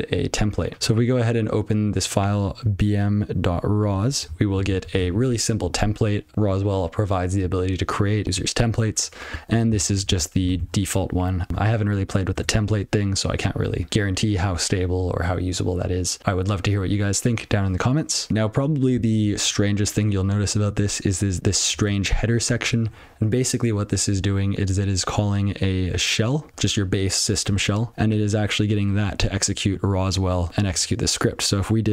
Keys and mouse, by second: 0.7 Return, 2.7 click, 4.2 ctrl+p, 4.4 ctrl+p, 9.6 ctrl+n, 9.7 ctrl+f, 10.0 ctrl+f, 12.3 Return, 20.7 click, 21.3 click, 21.7 click, 26.5 click, 29.0 click, 29.3 click, 29.7 click, 30.5 click, 30.6 click.